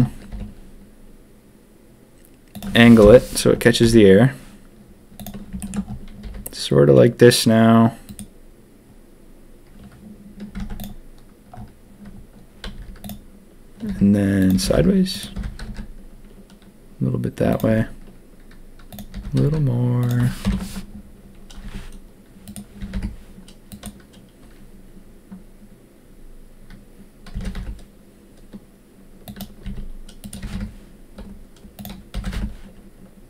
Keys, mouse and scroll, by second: 0.3 r, 3.0 ctrl+KP_1, 3.8 s, 5.6 shift+middle click, 6.2 r, 10.5 z, 12.7 z, 13.8 r, 14.5 g, 15.3 g, 17.5-20.0 drag, 17.6 s, 19.1 g, 20.4 ctrl+KP_3, 21.6 s, 22.8 s, 27.3 g, 29.6 s, 30.4 s, 32.1 g.